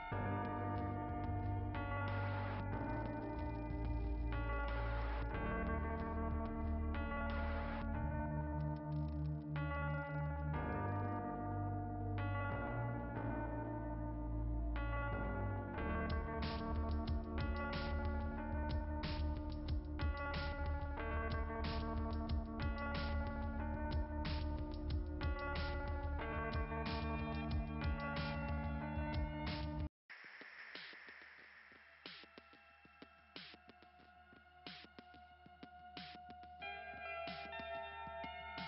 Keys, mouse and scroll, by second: 0.8 click, 4.9 click, 6.7 click, 8.4 click, 8.9 click, 14.4 click, 16.9 click, 17.9 click, 18.8 click, 21.7 click, 23.8 click, 25.3 click, 30.4 click, 30.4 ,, 31.5 click, 33.3 right click, 33.6 right click, 34.0 right click, 36.8 click.